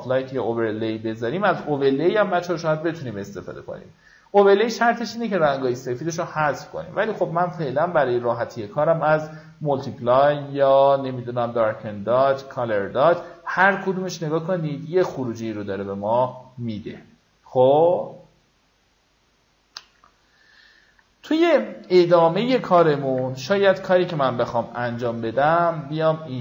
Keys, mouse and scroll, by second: 2.5 w, 3.0 click, 3.2 w, 3.6-4.7 drag, 5.3 ctrl+d, 7.0 click, 20.7 alt+scroll down 1, 22.0 click, 23.3 v, 23.9-24.2 alt+scroll up 1, 25.5 click.